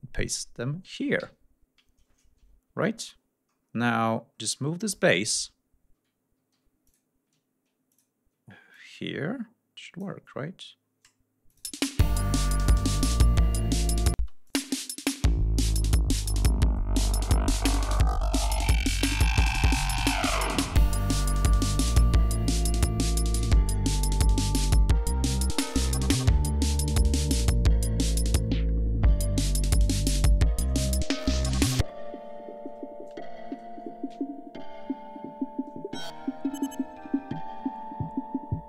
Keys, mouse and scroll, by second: 1.2 ctrl+v, 3.5-4.6 scroll down 4, 4.8-5.3 scroll down 4, 5.4 scroll up 2, 6.2 scroll up 2, 6.5 g, 6.9 click, 7.9 ctrl+click, 8.8-10.2 ctrl+drag, 10.5 scroll down 2, 11.5 click, 11.7 space, 14.2 space, 14.5 click, 15.4-15.8 scroll up 2, 16.1 scroll down 2, 16.7 scroll up 2, 22.6 ctrl+scroll down 2, 23.0-24.0 ctrl+scroll up 4, 24.8 ctrl+scroll up 2, 25.4 ctrl+scroll up 2, 26.5 ctrl+scroll down 2, 29.4 ctrl+scroll up 2, 32.1 ctrl+scroll down 2, 33.2-34.0 scroll up 4, 34.6 ctrl+scroll up 2, 35.9 ctrl+scroll down 2, 36.6-37.1 ctrl+scroll down 2, 37.2-38.0 scroll down 4, 38.3-38.6 scroll up 2.